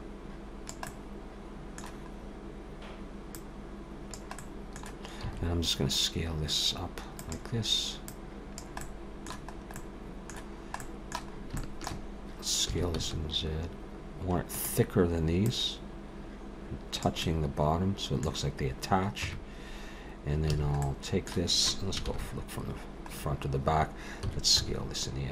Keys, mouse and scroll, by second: 0.9 middle click, 2.2-3.3 scroll down 2, 3.3 click, 4.4 middle click, 6.1 s, 8.1 click, 8.8 middle click, 9.6-10.1 scroll up 2, 9.8 middle click, 10.8 middle click, 11.3 scroll up 2, 11.6 shift+middle click, 11.9 shift+middle click, 12.7 s, 15.5 click, 17.2 middle click, 19.2 Tab, 20.5 a, 20.8 middle click, 22.1 ctrl+KP_1, 23.2-23.8 scroll down 4, 24.2 s.